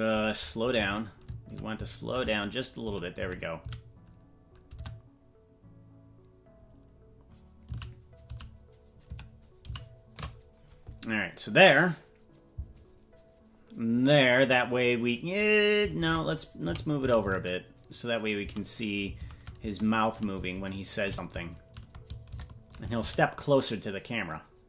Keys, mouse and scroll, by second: 15.9 shift+`.